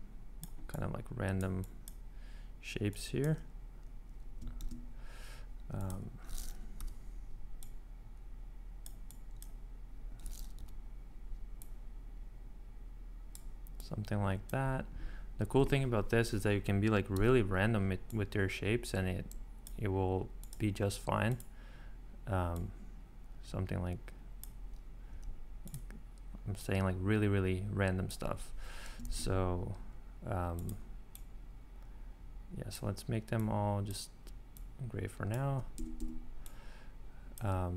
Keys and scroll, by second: 4.6 shift+e, 7.1 o, 10.6 o, 17.1 p, 25.1 v, 29.1 shift+x, 35.8 Escape.